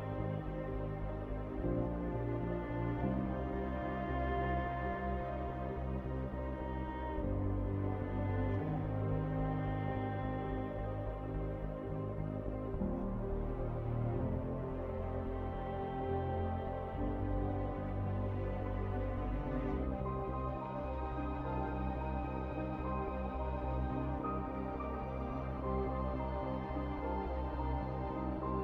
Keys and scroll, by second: 2.5 w, 15.4-16.1 typing, 18.7-23.5 typing, 26.4-28.6 typing.